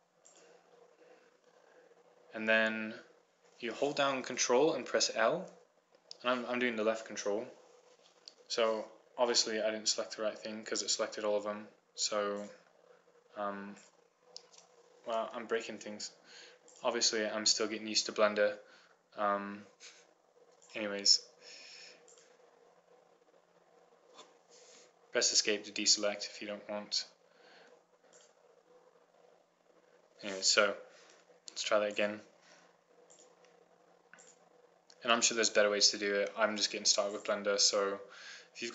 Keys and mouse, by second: 7.0 ctrl+l, 11.5-13.2 middle drag, 13.2 right click, 13.5-14.8 drag, 14.8 middle click, 15.3 middle click, 16.8 ctrl+z, 21.5-23.5 drag, 23.5-24.6 right drag, 26.9 Escape, 28.2 Escape, 29.4 click, 32.9-38.7 right drag.